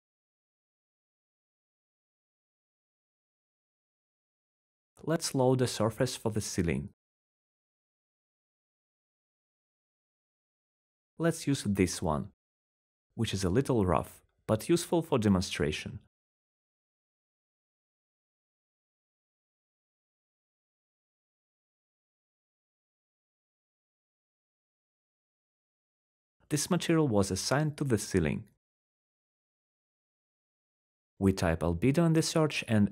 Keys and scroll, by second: 1.9-3.0 typing, 3.7 Return, 4.9-7.0 typing, 27.5-28.9 typing.